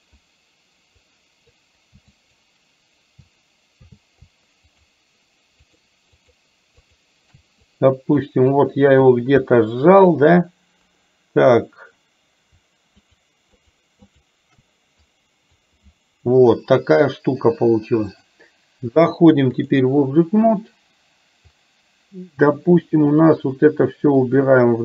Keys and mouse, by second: 1.1 click, 2.2 click, 4.7 shift+click, 5.7 shift+click, 6.1 shift+click, 6.9 shift+click, 7.7 click, 8.5 click, 9.4 KP_1, 13.0 shift+click, 13.6 shift+click, 14.1 shift+click, 15.2 click, 18.1-19.9 drag, 21.5-22.6 drag, 24.6 click.